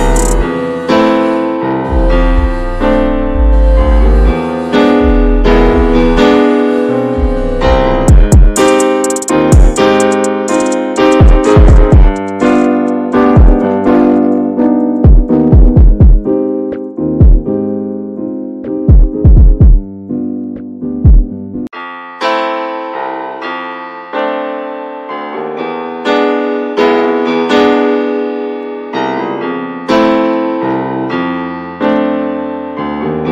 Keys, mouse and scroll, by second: 0.5 scroll down 3, 0.8 alt+middle click, 1.9-2.3 scroll down 2, 2.3 /, 3.4 /, 4.6 middle click, 5.2-7.4 shift+scroll up 13, 5.4 shift+middle click, 6.5 shift+middle click, 7.4 click, 7.8 alt+shift+click, 8.2 alt+shift+click, 8.8 right click, 9.1 a, 9.4 a, 12.0 a, 12.1-13.3 right drag, 13.3 shift+middle click, 14.2 alt+z, 14.5 shift+middle click, 14.7-15.1 scroll up 4, 15.1 alt+z, 15.4 click, 15.8 middle click, 16.4-17.0 scroll up 5, 17.0 shift+middle click, 17.3-17.6 scroll up 1, 17.6 middle click, 18.6-19.5 scroll up 4, 19.5 click, 19.9 alt+shift+click, 20.0-20.3 scroll down 2, 20.3-22.7 middle drag, 22.7 alt+shift+click, 23.1 scroll down 3, 23.7-24.9 shift+middle drag, 24.9-25.5 scroll up 5, 25.5 shift+middle click, 25.8-26.3 scroll up 3, 26.3 alt+shift+click, 27.0 ctrl+z, 27.3 alt+shift+click, 27.6 scroll down 3, 27.8 middle click, 28.4-30.0 scroll down 9, 30.0 middle click, 30.8-31.8 scroll up 3, 31.8 alt+shift+click, 32.4 right click, 32.7 a, 33.0 a, 33.2 right click.